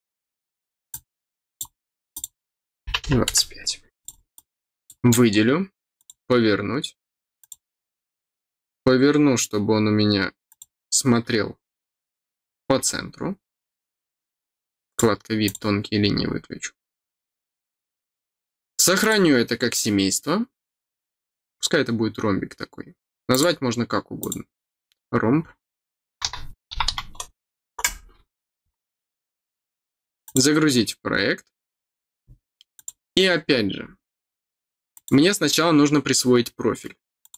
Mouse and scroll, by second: 0.8 click, 2.1 click, 3.9 click, 4.3 click, 5.9 click, 7.3 click, 10.4-14.9 drag, 15.4 click, 18.9 click, 23.3 click, 24.1 click, 30.2 click, 32.7 click, 33.4 middle click, 33.4-33.8 scroll up 2, 33.7 middle click, 34.2 middle click, 34.2 scroll down 1, 34.9 click, 37.2 click.